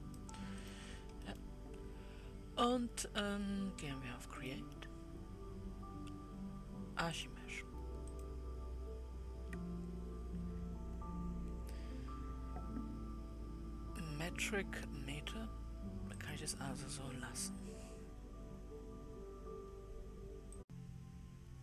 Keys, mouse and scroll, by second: 0.0-1.7 drag, 1.7-4.9 middle drag, 4.9-7.7 drag, 8.6-19.8 drag.